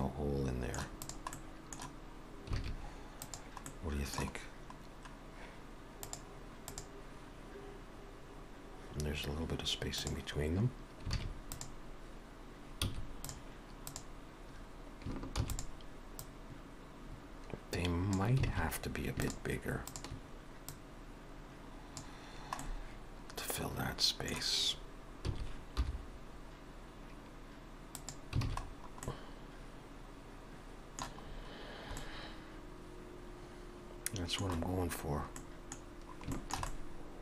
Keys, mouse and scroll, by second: 1.0 click, 1.4 middle click, 2.6 alt+a, 3.3 click, 3.7 middle click, 4.4 scroll down 1, 6.3 scroll down 1, 11.2 alt+a, 11.6 click, 12.9 x, 13.9 click, 15.6 shift+d, 16.2 click, 18.5 alt+a, 20.2 shift+click, 20.7 click, 22.6 middle click, 25.3 s, 28.5 alt+a, 28.7-29.0 scroll down 4, 29.1 middle click, 31.3-31.8 scroll up 4, 32.0 middle click, 34.7 scroll down 1, 35.4 middle click, 35.4-36.4 scroll down 4, 36.4 shift+middle click, 36.7 middle click.